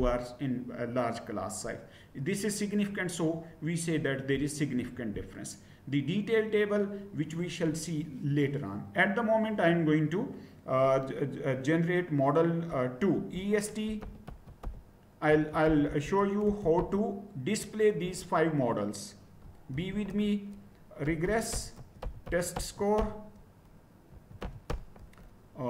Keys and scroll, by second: 13.8-18.0 typing, 19.7-25.3 typing.